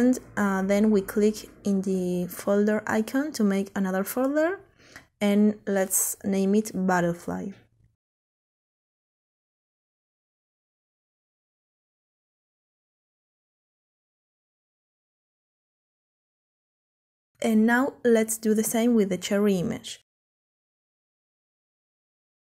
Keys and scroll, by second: 8.5-14.4 typing.